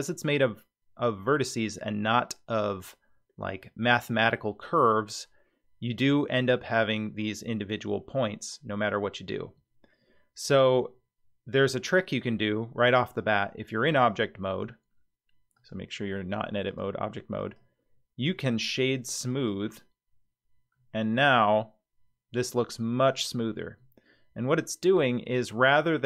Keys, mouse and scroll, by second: 15.5-16.9 drag, 17.4-19.5 right drag, 20.7-23.0 middle drag, 23.2-23.7 scroll down 1, 23.7 scroll down 3.